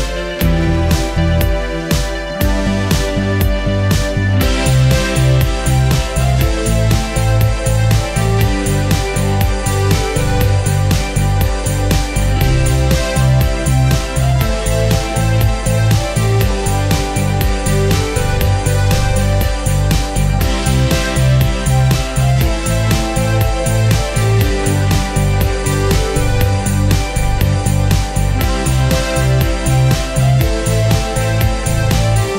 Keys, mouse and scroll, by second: 0.2-0.7 scroll down 1, 0.7 click, 3.7-4.5 scroll up 1, 5.3 click, 6.7 ctrl+space, 7.5 click, 13.5-19.8 ctrl+drag, 21.6-22.2 scroll down 1, 22.3 click, 22.6 scroll up 1, 23.2-27.0 ctrl+drag, 27.6 scroll down 1, 29.0 p, 29.9 click, 31.1 p, 31.4 click.